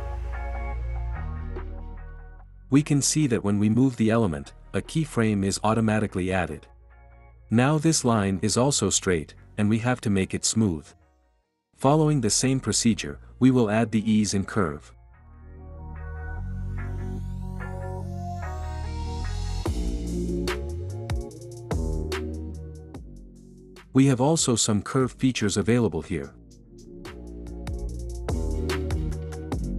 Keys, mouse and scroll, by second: 2.5 click, 11.6-12.7 drag, 14.8 click, 18.3-19.3 drag, 21.1-22.1 drag, 29.1-29.7 drag.